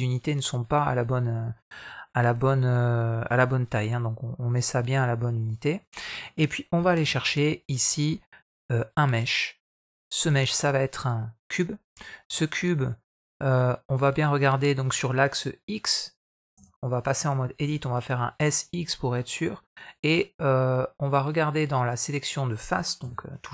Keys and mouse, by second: 5.6 middle click, 6.9 shift+a, 11.7 middle drag, 12.2 middle click, 13.0-13.7 middle drag, 14.0-14.7 middle drag, 16.4 Tab, 17.5 s, 18.8 middle click, 22.9 3.